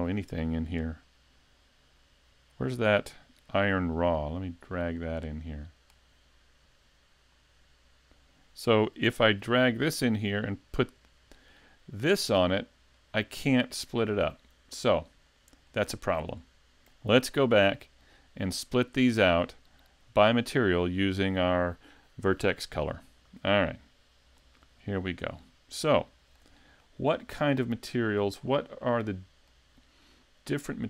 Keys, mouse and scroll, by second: 26.0 shift+middle click, 26.6-27.5 scroll up 1, 27.5 middle click, 28.4-29.2 scroll up 3, 28.8 middle click.